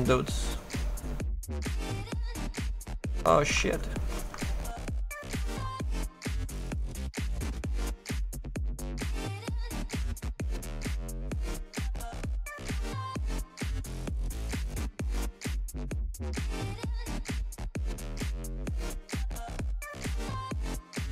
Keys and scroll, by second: 3.6 ctrl+z.